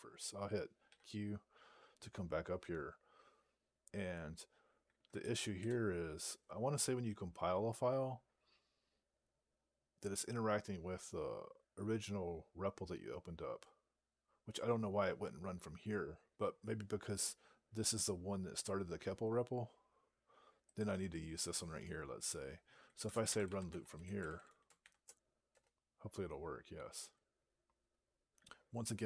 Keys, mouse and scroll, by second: 0.7 q, 20.6 click, 22.6-25.1 typing, 25.4 Return.